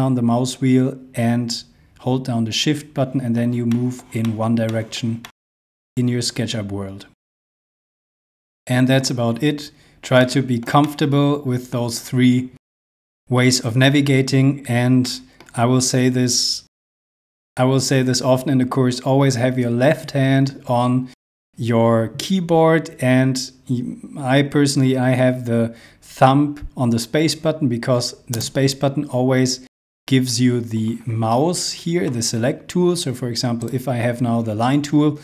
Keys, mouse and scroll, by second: 3.7 shift+middle click, 4.3 shift+middle click, 5.2 shift+middle click, 9.3 scroll down 1, 10.3 shift+middle click, 15.1 middle click, 15.6 scroll up 1, 28.4 space, 33.7 Left.